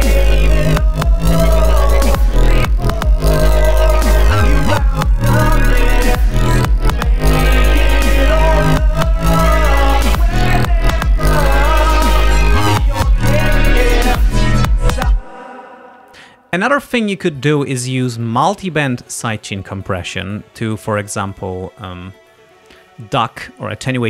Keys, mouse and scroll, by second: 2.9 click, 4.3-5.7 drag, 7.3 click, 7.9 click, 9.4 click, 10.7 click, 12.0 ctrl+scroll down 2, 14.0 ctrl+scroll down 2, 15.1 space, 21.1-21.8 scroll up 2, 22.5 scroll down 2.